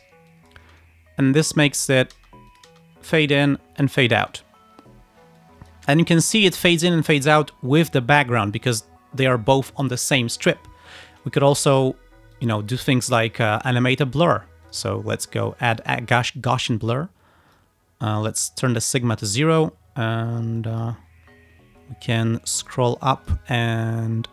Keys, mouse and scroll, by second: 0.4 click, 0.7 space, 2.2 space, 2.5 click, 4.2 space, 5.4 click, 6.5 space, 8.6 space, 12.4 click, 14.7 click, 16.0-16.3 scroll down 2, 16.5-17.0 scroll down 4, 17.6-18.9 drag, 20.7 click, 21.1-21.8 scroll up 2, 21.8 scroll down 2, 22.5-23.5 drag.